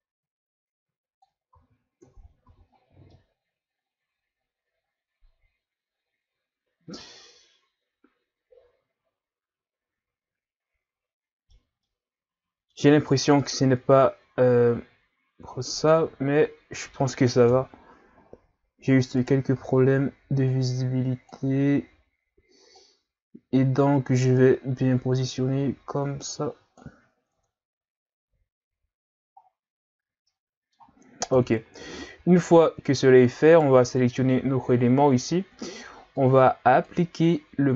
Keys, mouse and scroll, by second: 1.5 ctrl+z, 2.0 Tab, 2.5 a, 2.7-3.1 scroll down 3, 3.1-6.1 middle drag, 11.8-16.5 middle drag, 17.5 KP_3, 18.2-19.2 scroll up 6, 19.2 right click, 19.6 Tab, 20.5-27.3 drag, 27.3 Tab, 28.2 a, 29.4-30.3 scroll down 1, 30.3-31.3 middle drag, 31.3 KP_3, 32.2-33.3 scroll up 4, 33.3 scroll up 1, 33.5 right click, 36.2-37.7 drag.